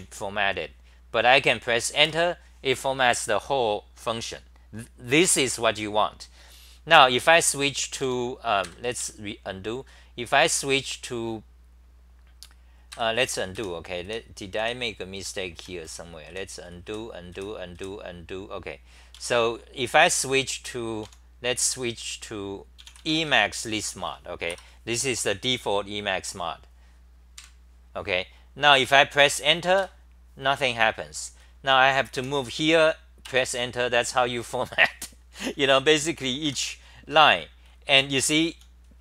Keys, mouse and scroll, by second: 0.0-0.4 typing, 2.0 Tab, 8.1 a, 8.6 ctrl+g, 9.0 f, 12.9 ctrl+g, 13.2-17.8 typing, 19.2 Home, 21.2 a, 24.5 Return, 27.4 super+=, 29.8 Tab, 32.2 t, 33.2 Tab, 35.5 t, 35.7 t, 35.8 t, 36.4 Tab, 37.4-39.0 typing.